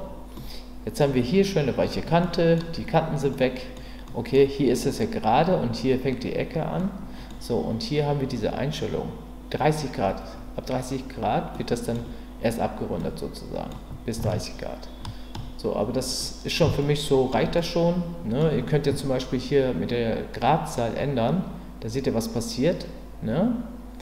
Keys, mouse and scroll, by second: 0.4-1.0 middle drag, 2.2-2.5 middle drag, 3.3-3.8 middle drag, 4.1 middle click, 6.8-7.3 middle drag, 11.5-11.9 middle drag, 13.0-13.7 middle drag, 14.3-15.3 shift+middle drag, 16.2-16.5 middle drag, 16.9-17.3 shift+middle drag, 17.6-18.4 middle drag, 20.6-24.0 drag.